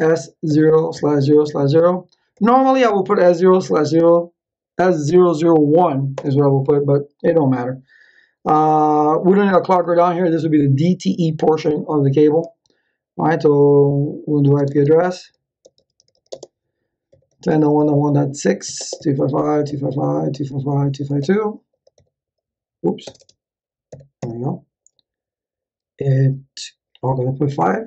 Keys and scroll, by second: 0.0-2.1 typing, 6.1 Return, 14.2-21.9 typing, 23.0 BackSpace, 23.8 5, 24.1 Return, 27.5 Up.